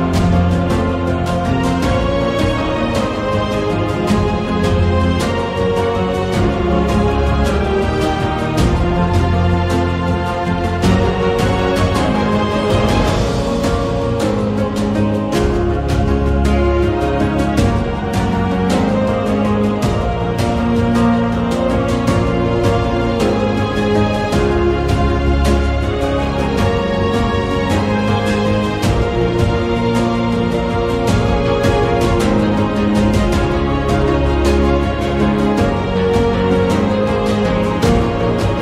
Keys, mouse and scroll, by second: 1.2 ctrl+b, 5.8 a, 5.9 a, 6.1-7.3 middle drag, 8.1 shift+middle click, 9.8 Tab, 10.6 2, 10.8 shift+click, 12.7 Tab, 13.0 a, 13.1 a, 13.2 a, 13.2 middle click, 14.9 Tab, 15.0 a, 15.5 ctrl+r, 18.2 a, 18.3 a, 19.5 alt+shift+click, 20.6 r, 22.4 s, 23.6 s, 27.7 s, 29.1 click, 30.6 s, 32.3 a, 32.5 a, 32.6 middle click, 34.5 alt+shift+click, 34.8 alt+shift+click, 35.7 r.